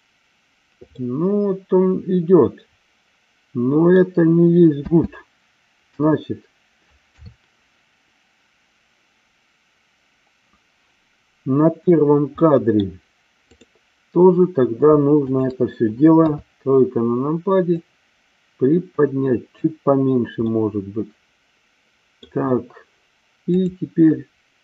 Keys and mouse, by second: 1.0-4.1 middle drag, 4.7 space, 6.0 KP_1, 7.1 KP_3, 12.3-13.0 middle drag, 16.2 KP_3, 17.8-19.4 drag, 20.5-22.4 middle drag, 23.5 click.